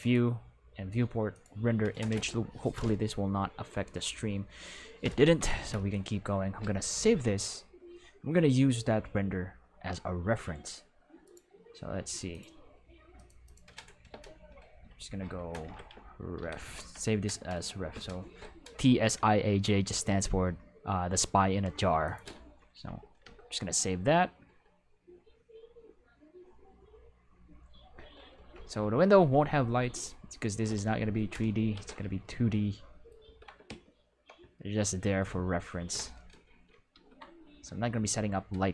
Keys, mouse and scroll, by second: 1.3 click, 6.6 alt+s, 11.2 click, 12.3 click, 13.1 click, 13.4 click, 14.7-16.6 typing, 16.7 Return, 22.0 click, 22.8 Return, 23.2 Return, 31.7 ctrl+s, 32.2 ctrl+middle click, 33.2 ctrl+s, 35.9 Escape, 36.9 ctrl+s.